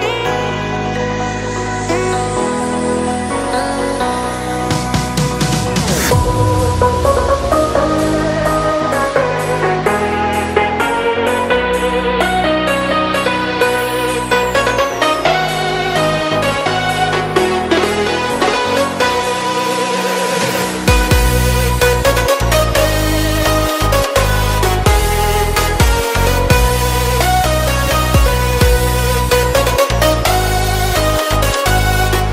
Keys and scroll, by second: 7.8 shift+super+Return, 31.5 Up.